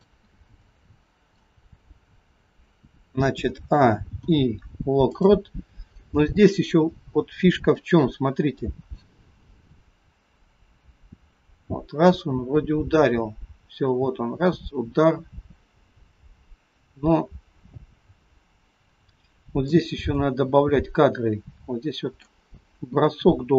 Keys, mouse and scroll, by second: 0.4 middle click, 3.5 a, 4.2 i, 6.8-7.9 scroll up 5, 7.9 middle click, 9.4 click, 20.2 middle click, 22.9 click.